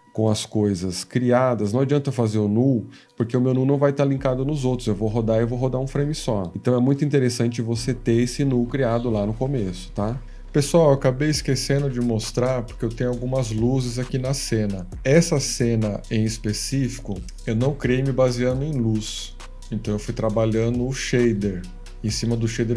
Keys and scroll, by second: 10.2 Return, 10.2 F17, 15.6 F18, 15.6 7.